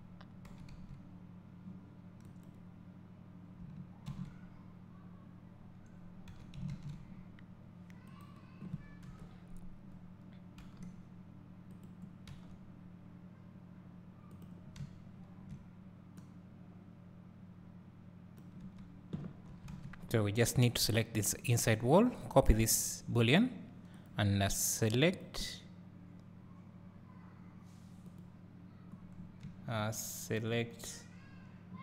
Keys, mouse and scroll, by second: 0.6 r, 4.2 shift+d, 8.3 right click, 9.1 KP_7, 10.7 g, 11.9 click, 12.4 r, 14.4 click, 16.3-20.1 drag, 18.8 Tab, 19.9 a, 24.2 click, 29.1 scroll down 1, 29.9 `, 30.5 scroll up 1.